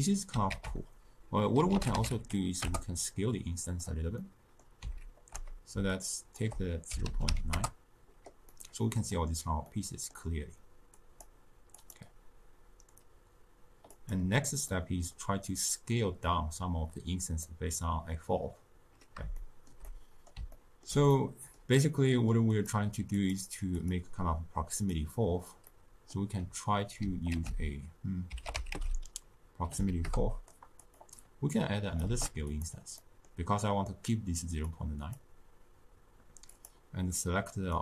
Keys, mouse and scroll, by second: 2.6 ctrl+a, 7.5 shift+click, 8.4-11.2 middle drag, 11.2-14.6 drag, 14.6-22.5 middle drag, 22.5-23.8 drag, 24.9 click, 30.0 ctrl+a, 32.0 shift+d, 36.7 click.